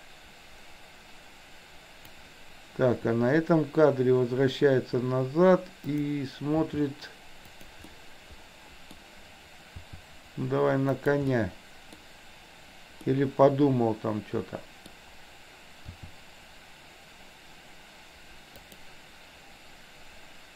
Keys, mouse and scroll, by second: 5.8 click, 6.7 r, 7.9-8.9 middle drag, 8.9-9.5 scroll down 1, 9.8 r, 11.3-11.9 middle drag, 13.2-14.9 middle drag, 15.9 r.